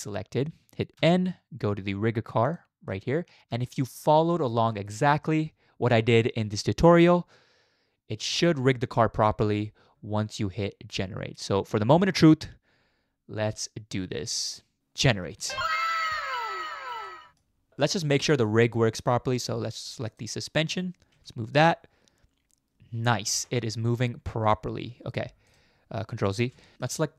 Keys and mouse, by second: 0.9 n, 2.4 click, 3.7 shift+middle click, 4.1 middle click, 16.3-16.9 middle drag, 17.1-17.4 shift+middle drag, 21.1 g, 26.4 ctrl+z, 26.7 shift+middle click.